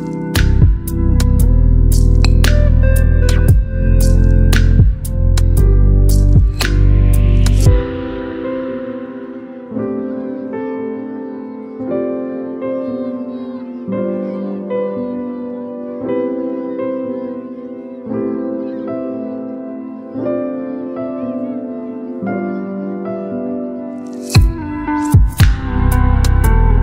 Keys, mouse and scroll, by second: 1.9 ctrl+g, 4.2 ctrl+click, 5.9 click, 9.8 click, 11.5-18.1 alt+drag, 19.0-20.6 drag, 20.9 ctrl+t, 23.5-25.9 shift+click.